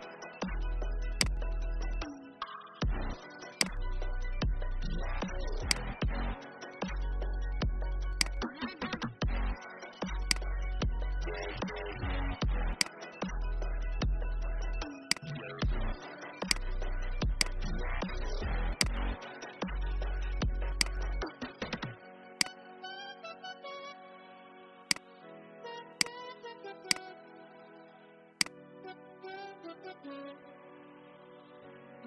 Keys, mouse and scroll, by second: 0.3 Up, 0.5 Up, 1.0 click, 4.2-5.6 alt+scroll down 1, 5.6 click, 6.8 alt+scroll up 1, 8.0-9.6 drag, 10.1 shift+click, 12.7-18.4 drag, 18.7 shift+click, 20.6 alt+click, 22.2 right click, 24.8-25.8 drag, 26.7 shift+click, 29.9 Right, 30.4 Right.